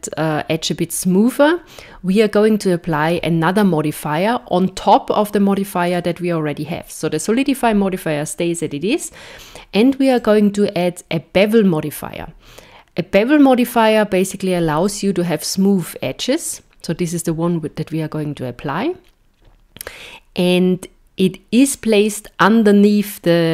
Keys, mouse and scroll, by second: 5.9 click, 10.1 click.